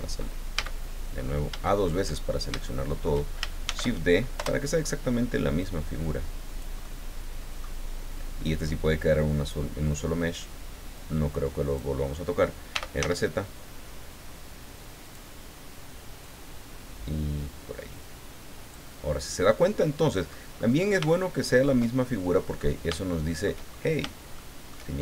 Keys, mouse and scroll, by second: 0.5 a, 1.1-1.5 scroll up 1, 1.7 shift+middle click, 2.1-2.4 shift+scroll down 1, 2.6 shift+middle click, 3.6 shift+d, 4.4 Return, 5.6-6.8 drag, 6.8 middle click, 8.4-9.7 drag, 10.9 click, 12.7 r, 13.0 z, 15.0 click, 16.2-18.9 drag, 19.0-19.3 scroll down 2, 19.4-20.5 middle drag, 20.6-20.9 scroll up 2, 21.2 shift+middle click, 22.3 middle click, 23.1 shift+middle click, 23.6 shift+scroll up 2, 24.3 shift+middle click.